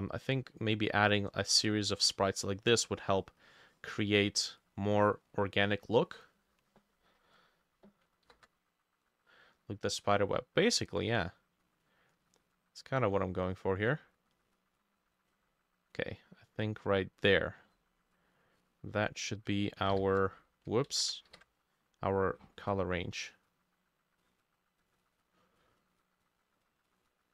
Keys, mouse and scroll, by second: 8.1-27.3 ctrl+drag, 8.1 ctrl+middle click, 8.3 ctrl+u, 19.5 ctrl+middle click, 20.0 ctrl+i, 20.7 ctrl+middle click, 20.9 ctrl+z, 21.3 ctrl+u.